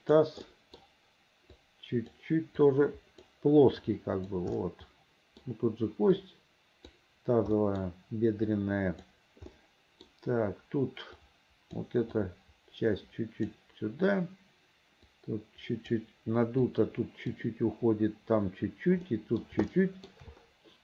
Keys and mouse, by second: 0.6 middle click, 1.6 click, 2.7 click, 4.0 click, 4.7 middle click, 6.3 click, 7.7 middle click, 8.6 click, 9.6 middle click, 11.3 middle click, 12.3-13.7 drag, 15.2 click, 16.8 click, 19.2 middle click, 19.8 shift+middle click.